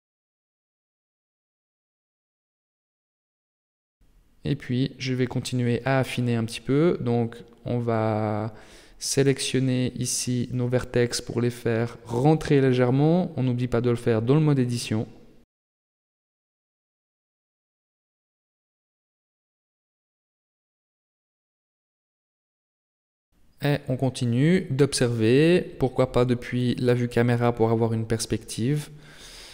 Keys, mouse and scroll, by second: 1.0 KP_3, 1.9-2.5 scroll up 4, 2.5 shift+middle click, 2.9 shift+scroll down 1, 3.1-3.8 scroll up 2, 3.8 Tab, 4.4 a, 5.5 b, 6.9 g, 10.7 Tab, 12.4 right click, 12.8 Tab, 13.5 a, 13.9 b, 15.2 g, 18.5 Tab, 18.8-19.9 scroll down 7, 19.9 shift+middle click, 20.5-21.1 scroll down 2, 21.1 middle click, 21.7 shift+middle click, 22.3 middle click, 24.6 KP_0, 27.7 middle click, 28.7 scroll down 1, 28.8-29.5 scroll up 8.